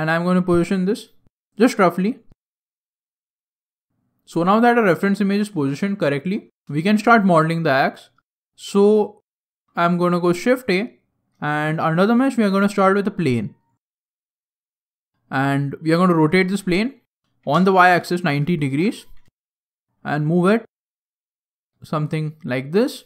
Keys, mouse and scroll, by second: 2.4 scroll down 1, 2.8 shift+middle click, 9.3 shift+a, 11.4 shift+a, 14.2 scroll down 3, 14.3 scroll down 3, 14.4 middle click, 16.1 r, 19.9 middle click, 19.9 g, 21.9 middle click.